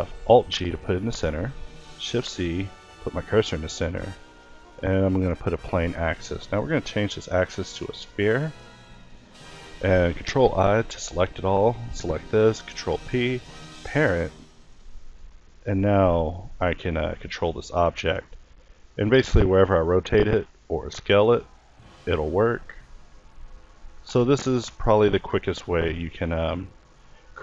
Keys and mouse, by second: 0.8 a, 3.9-5.2 middle drag, 9.4 ctrl+i, 11.9 ctrl+p, 13.8 a, 14.7 click, 15.0 r, 17.7 alt+a, 18.1 r, 20.0 s, 21.0 s, 22.1 r, 22.7 s, 23.7 middle click, 25.0 alt+g, 25.3 alt+r, 27.3 alt+g.